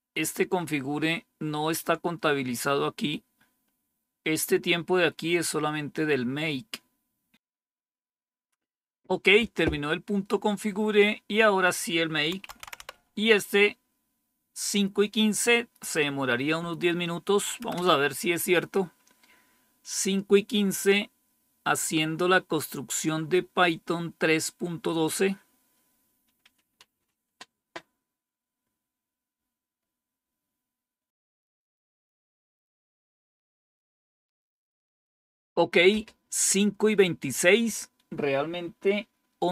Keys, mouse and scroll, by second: 0.1-0.9 scroll down 2, 0.9-1.7 scroll up 1, 4.6-5.5 scroll down 1, 11.5 click, 12.1-13.3 typing, 17.6 Return.